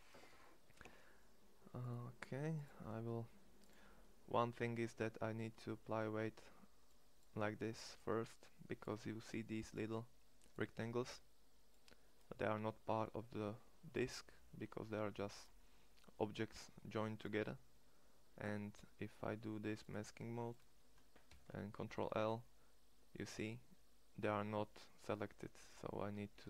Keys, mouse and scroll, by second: 3.8-12.2 drag, 18.4 click, 18.5 middle click, 20.2 middle click, 21.0 ctrl+l, 26.0 shift+s.